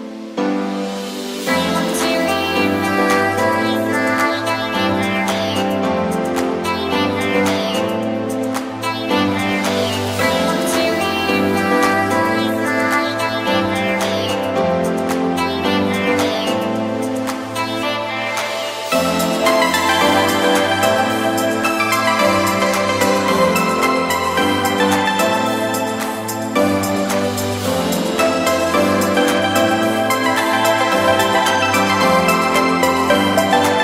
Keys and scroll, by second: 4.6 super+-, 14.9 super+-, 15.4 super+=, 18.5 super+-, 19.0 super+=, 30.7 b, 31.7 ].